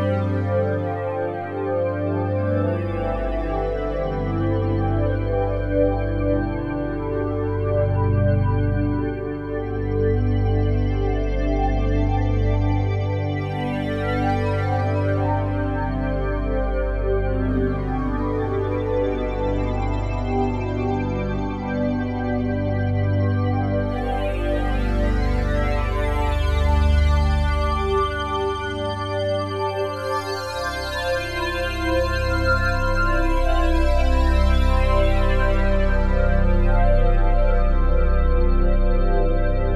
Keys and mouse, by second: 0.1 alt+click, 1.2 ctrl+alt+click, 2.1 alt+click, 3.4-5.0 alt+drag, 6.9 typing, 6.9 click, 7.3 ctrl+alt+click, 7.7 ctrl+alt+click, 7.9 ctrl+alt+click, 8.7 typing, 9.2 click, 10.0 typing, 10.6 ctrl+alt+click, 11.2-14.7 alt+drag, 15.5 typing, 16.7 alt+click, 17.3 ctrl+alt+click, 20.2 click, 21.6 click, 22.8 alt+shift+click, 24.9 ctrl+alt+click, 25.7 alt+click, 26.4 alt+click, 27.0 alt+click, 28.1-29.3 ctrl+alt+drag, 29.7 click, 30.9-32.4 drag, 33.2 alt+click, 33.7 click, 34.9-36.2 alt+drag, 34.9 typing, 36.4 alt+click, 37.2 alt+click, 39.4 click.